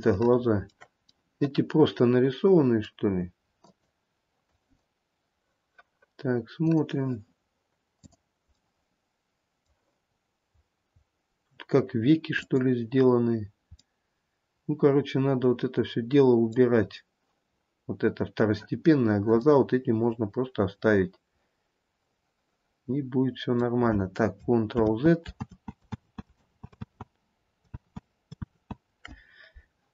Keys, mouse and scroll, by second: 0.2 shift+middle click, 0.9 shift+middle click, 1.3 middle click, 2.8 middle click, 3.3-3.8 scroll up 1, 3.8 click, 4.5 click, 8.2 click, 8.8 middle click, 10.3-11.2 scroll up 1, 11.2-11.8 scroll down 1, 12.0-12.6 scroll down 1, 12.6 click, 14.1 middle click, 14.6 middle click, 14.9 middle click, 15.3 middle click, 17.0-18.4 scroll down 2, 18.4-19.8 scroll down 1, 19.8 middle click, 23.7 middle click, 25.0 ctrl+z, 26.0 ctrl+z, 26.3 ctrl+z, 26.6 ctrl+z, 27.2 ctrl+z, 28.1 ctrl+z, 28.8 ctrl+z.